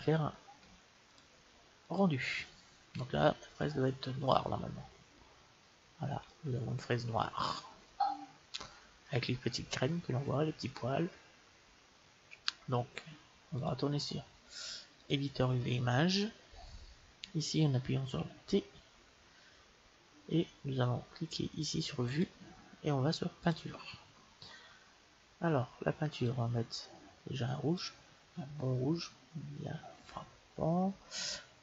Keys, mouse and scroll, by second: 0.9-2.8 drag, 6.3-9.5 middle drag, 13.4-15.2 drag, 18.2 t, 19.8-21.4 middle drag, 21.9-23.7 drag, 27.7 click.